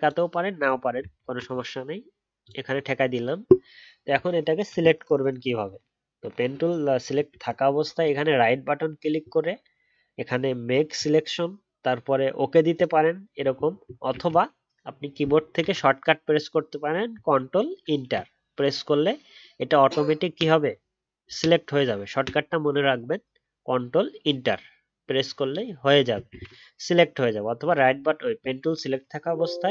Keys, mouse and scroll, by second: 14.1 ctrl+z, 17.8 ctrl+Return.